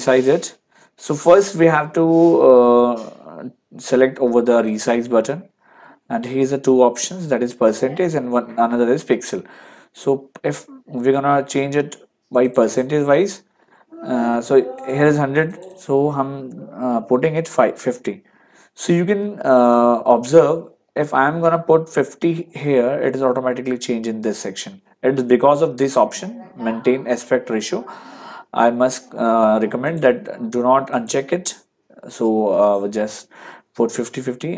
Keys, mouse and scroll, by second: 4.7 click, 12.5 click, 14.8 click, 17.4 KP_5, 17.8 KP_0, 29.9 click, 30.9 click.